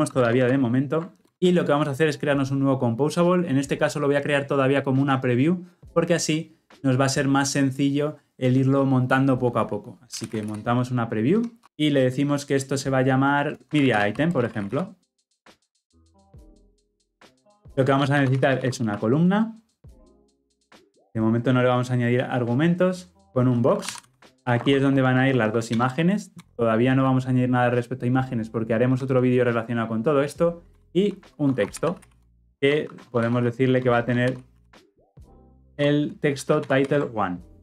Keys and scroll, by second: 0.3 ctrl+alt+l, 11.4 Return, 15.0 Return, 15.1 ctrl+z, 20.0 Return, 24.2 ctrl+alt+l, 24.3 ctrl+alt+o, 25.6 alt+Return, 36.6 ctrl+alt+l, 36.8 ctrl+alt+o.